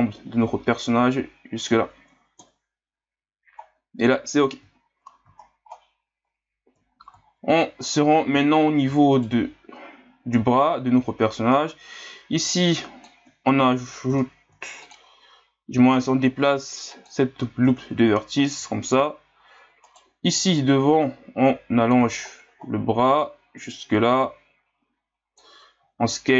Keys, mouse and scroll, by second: 2.4 KP_1, 3.6-4.5 scroll down 4, 4.5-5.0 scroll down 4, 5.3-6.9 scroll up 18, 6.9 scroll up 1, 7.5-8.4 scroll up 6, 8.4 scroll down 5, 9.1 alt+right click, 11.7-14.5 drag, 14.5 ctrl+r, 18.1-19.8 scroll up 1, 19.8 alt+right click, 20.6-22.2 drag, 22.2-23.2 scroll up 9, 23.2-25.8 drag, 25.8 s.